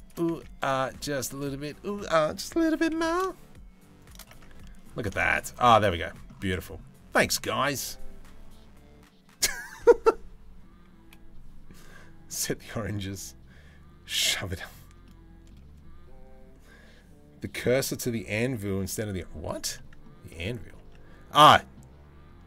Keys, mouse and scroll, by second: 0.0 Tab, 0.3 middle click, 0.9 middle click, 1.2 Tab, 2.3 g, 4.0 Tab, 4.2 middle drag, 4.8 shift+middle click, 5.4 middle click, 5.5 middle drag, 6.1 middle drag, 14.6-15.1 middle drag, 19.4 middle drag, 20.0 Tab, 20.5 Tab, 21.1 middle drag.